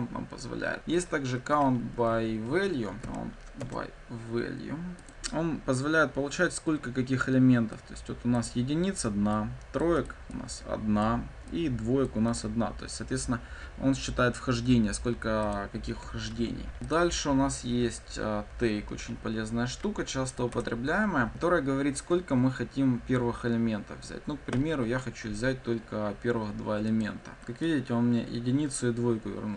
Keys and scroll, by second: 2.1 ctrl+z, 2.8 ctrl+z, 2.9 ctrl+d, 3.5 Return, 5.0 ctrl+F5, 16.3 ctrl+d, 20.5 Return, 27.0 ctrl+F5.